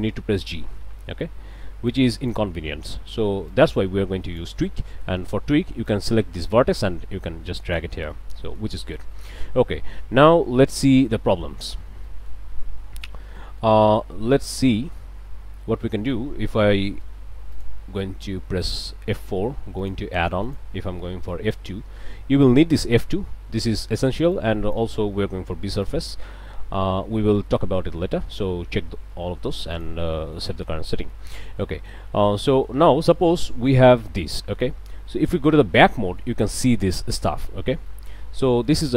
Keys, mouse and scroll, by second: 0.3 g, 1.1 Escape, 1.9 click, 3.5-4.6 drag, 5.9-8.0 drag, 8.1 ctrl+z, 8.4 ctrl+click, 9.1 click, 11.0 click, 11.8 a, 12.1 click, 13.4 click, 14.2 click, 15.9 click, 17.0 F4, 17.5 click, 18.7 click, 19.8 click, 20.4 click, 21.3 f, 21.4 KP_2, 24.0 click, 24.4 click, 25.8 b, 26.0 s, 26.2 u, 29.7 click, 30.3 click, 31.1 alt+click, 31.3 alt+a, 31.6 alt+click, 32.5 click, 32.8 a, 37.9 click.